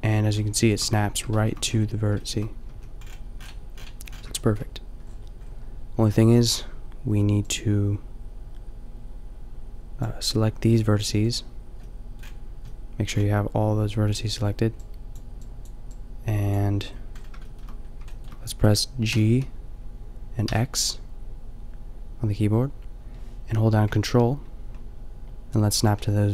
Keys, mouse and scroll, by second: 0.4 shift+middle click, 1.3 shift+middle click, 2.7 a, 3.8 middle click, 7.0 b, 10.7 g, 19.1 g.